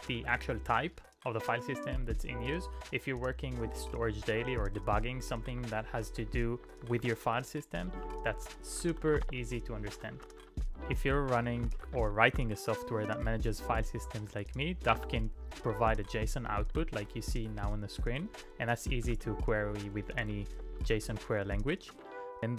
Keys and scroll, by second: 0.1 ctrl+u, 1.9-2.5 typing, 8.1-12.9 typing, 15.0 [, 15.8 ctrl+u, 16.1 ctrl+u, 16.6 ctrl+u, 19.1-21.8 typing, 20.9 ctrl+p, 21.1 ctrl+p.